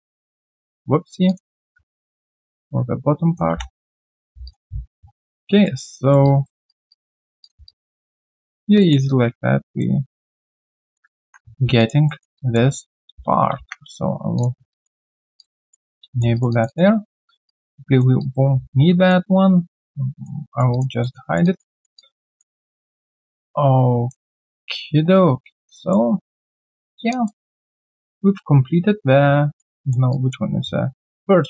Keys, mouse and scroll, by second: 1.4 double click, 1.6 w, 3.7 right click, 4.2 q, 4.7-5.3 scroll down 2, 4.8 q, 5.3 alt+click, 5.6 alt+middle click, 5.9 alt+right click, 6.2 alt+click, 6.9 alt+click, 7.9 alt+double click, 8.8 alt+middle click, 9.0 alt+click, 10.1 alt+click, 11.2 ctrl+1, 11.2 ctrl+scroll down 2, 11.8 alt+click, 12.0 alt+middle click, 12.3 alt+click, 13.1 ctrl+a, 13.5 ctrl+a, 14.7 alt+click, 15.0 alt+double click, 15.6 alt+right click, 15.8 alt+click, 16.1 alt+middle click, 16.3 alt+right click, 16.5 alt+click, 17.0 alt+middle click, 18.1 alt+middle click, 18.2 alt+click, 18.5-18.9 scroll down 2, 18.9 alt+right click, 20.1 middle click, 20.5 alt+right click, 20.7 alt+click, 21.0 alt+middle click, 21.2 alt+right click, 21.4 alt+click, 21.9 alt+click, 22.4 alt+middle click, 22.6 alt+scroll down 1, 22.8 alt+click, 23.1 alt+right click, 23.3 alt+click, 24.3 alt+middle click, 24.6 alt+click, 26.1 alt+scroll down 1, 26.5 alt+click, 26.8 alt+middle click, 27.1 alt+click, 27.4 alt+right click, 27.8 alt+middle click, 28.1 alt+click, 29.8 alt+middle click, 30.1 alt+click.